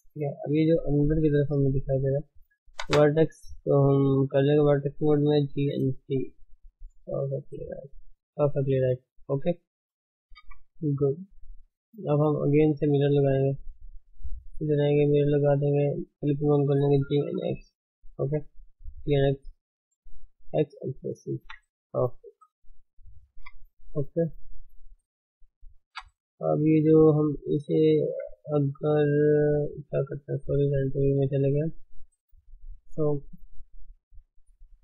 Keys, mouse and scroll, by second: 1.1 scroll up 1, 1.2 shift+middle click, 1.8-2.3 scroll up 2, 2.3 middle click, 2.8 1, 3.3 click, 3.6-5.4 middle drag, 5.4 g, 7.4 click, 8.3 g, 9.3 click, 9.4 g, 10.4 KP_1, 11.4-12.4 scroll down 7, 11.7 shift+middle click, 12.4 shift+z, 13.4 click, 13.8-14.3 scroll up 2, 15.2-16.1 drag, 17.1 g, 18.7 g, 19.6-20.6 middle drag, 20.6 x, 20.8 shift+z, 21.1-21.4 middle drag, 21.4 Tab, 22.3 alt+h, 22.6 click, 23.3 KP_1, 23.7-24.4 scroll down 1, 24.4-25.2 scroll up 4, 24.8 shift+middle click, 25.2 drag, 25.5 shift+middle click, 25.7-26.4 scroll up 2, 25.9 Tab, 26.4-29.3 shift+middle drag, 29.3 z, 31.6 click, 31.9-32.3 scroll down 2, 32.3-34.1 middle drag, 34.1 click.